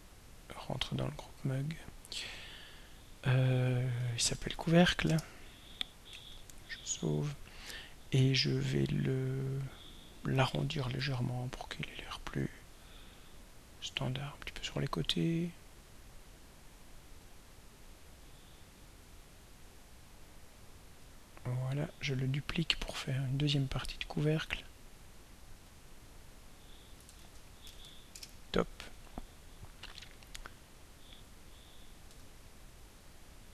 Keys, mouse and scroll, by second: 0.0 click, 0.5-1.6 drag, 2.1 click, 4.0-5.0 typing, 5.1 Return, 6.3 ctrl+s, 8.8 click, 11.3 ctrl+middle click, 12.4 ctrl+middle click, 15.6-17.4 drag, 19.6 click, 22.6 click, 24.5 click, 25.5 click, 26.2 click, 27.2 ctrl+a, 27.6-28.4 typing, 32.2 ctrl+a.